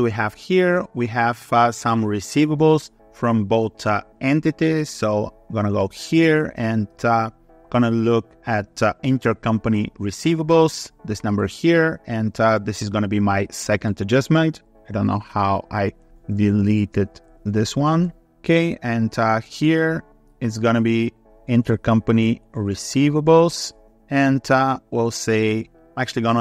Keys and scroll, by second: 19.4 ctrl+s.